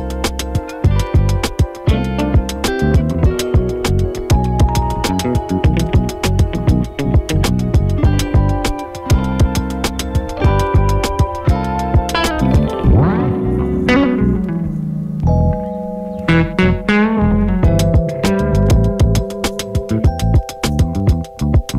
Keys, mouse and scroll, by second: 6.8-8.7 shift+drag, 10.2 [, 12.1-14.9 drag, 14.9 space, 16.6 click, 18.3 [, 19.2 click, 20.9 click, 21.1 [.